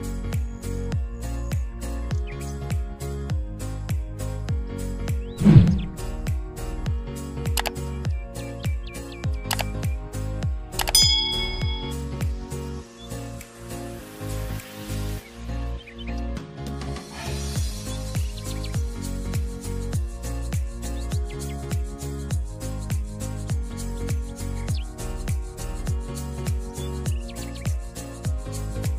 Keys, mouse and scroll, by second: 0.8 shift+a, 1.3 s, 1.8 scroll down 3, 2.1-2.8 scroll up 4, 3.1 click, 4.1 click, 4.9 g, 6.1-8.3 click, 8.3-10.1 drag, 10.4 click, 11.5 shift+a, 14.0 s, 17.5 click, 17.9 click, 18.7 KP_0, 21.2-21.5 scroll down 1, 21.6 click, 22.6 shift+a, 24.6 KP_0, 25.2 n, 26.8 scroll, 26.9-28.1 scroll down 19.